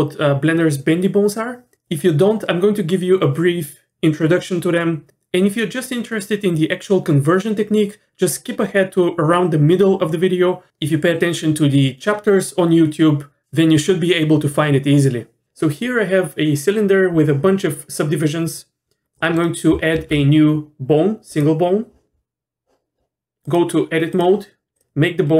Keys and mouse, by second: 19.2 middle click, 19.9 shift+a, 23.4-24.2 drag, 24.7 click.